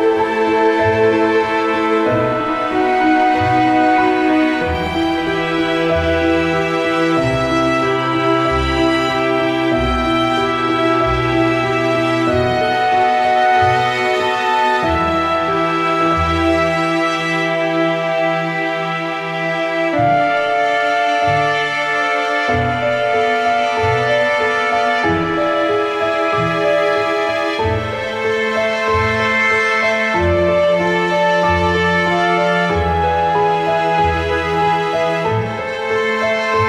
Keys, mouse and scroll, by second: 0.2 Down, 0.8 ctrl+t, 1.1-3.8 drag, 3.8 Return, 4.2 Down, 5.0 click, 6.7 ctrl+a, 7.0 ctrl+c, 7.4 click, 8.8 ctrl+v, 9.7 ctrl+t, 9.9-11.8 drag, 11.8 Return, 12.7 click, 14.5 ctrl+a, 14.8 ctrl+c, 15.2 click, 17.2 click, 17.7 ctrl+v, 18.7 ctrl+t, 19.1-21.7 drag, 21.7 Left, 23.1-24.6 drag, 24.6 Return, 24.9 Up, 26.3-28.0 drag, 29.5 ctrl+a, 29.7 ctrl+c, 30.1 click, 31.3 ctrl+v, 31.8 ctrl+t, 32.3-34.7 drag, 34.7 Return, 35.1-36.6 drag.